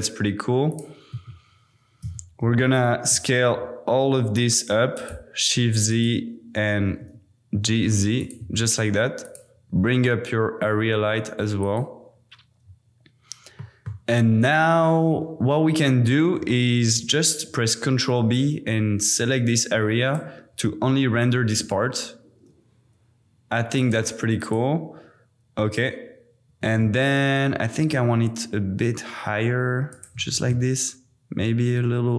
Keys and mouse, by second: 1.1 Tab, 2.0 a, 2.4 s, 3.3 shift+z, 4.9 click, 5.9 click, 6.8 g, 7.0 z, 8.2 click, 8.5 Tab, 9.7 g, 9.8 z, 11.6 click, 13.7 click, 16.7 super+b, 24.4 click, 26.5 g, 26.6 z, 29.9 shift+click, 30.3 r.